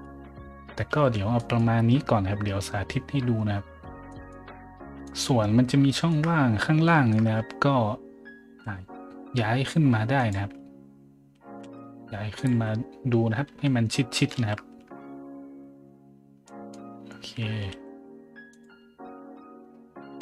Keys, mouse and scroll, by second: 0.9 a, 1.4 middle drag, 2.1 scroll up 1, 4.1 middle click, 5.0 right click, 5.4 middle click, 5.9 shift+middle drag, 6.9 shift+middle click, 8.2-9.1 typing, 10.1 click, 10.4-14.3 typing, 12.4 click, 16.4 middle drag, 17.4-18.7 typing, 18.5 click, 20.0 scroll up 1.